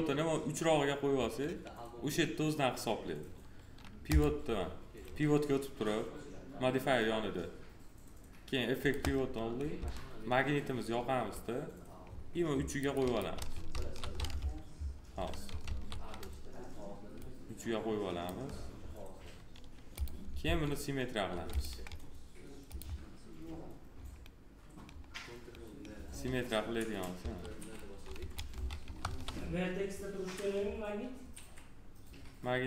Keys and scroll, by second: 9.7 s, 13.6 ctrl+z, 14.3 F3, 15.5 ctrl+z, 20.3 s, 27.1 1, 28.9 ctrl+z.